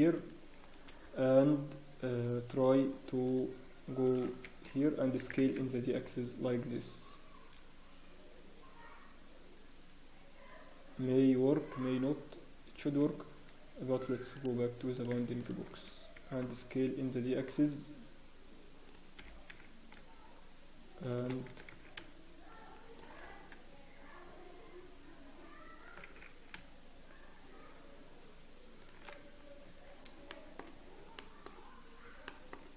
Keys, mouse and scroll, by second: 0.2 shift+right click, 0.6-1.0 scroll down 1, 1.1-1.8 scroll up 1, 3.2 click, 3.2 scroll down 8, 4.5 Escape, 5.2 s, 16.2 click, 16.2 s, 20.0 shift+g, 22.0 s, 23.2-23.8 scroll down 1, 23.8 Tab, 24.7 Tab, 24.8 Tab, 25.0 scroll up 1, 25.6 Tab, 25.6 scroll down 4, 26.1 scroll up 3, 26.1 s, 29.8 Tab, 29.8 scroll up 1, 30.3 shift+middle click, 30.6 scroll up 2, 31.1 shift+middle click, 32.3 shift+middle click.